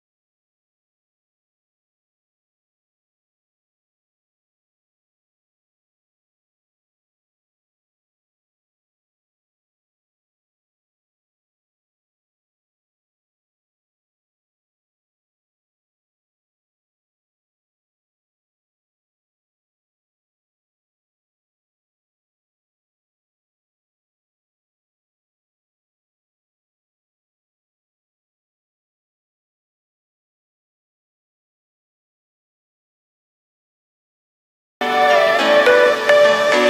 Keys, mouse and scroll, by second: 8.9 click, 9.3-9.7 scroll up 1, 10.7 shift+d, 15.5 click, 15.9 scroll down 1, 16.2-18.4 middle drag, 18.4 scroll up 1, 20.7 KP_7, 21.6-22.0 scroll down 1, 22.1-24.0 shift+middle drag, 24.0 click, 26.0 shift+d, 29.1-30.0 scroll up 6, 30.7 r, 32.9 s, 35.9-36.3 scroll down 1, 36.3-36.6 shift+middle drag.